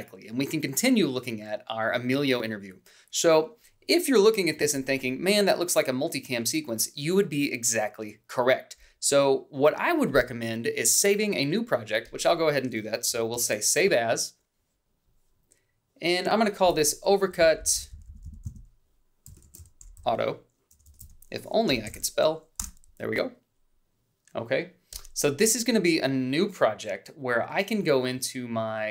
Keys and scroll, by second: 4.3 a, 13.1 ctrl+shift+s, 17.1 Right, 17.3 Left, 18.9-22.3 typing, 22.4 Return.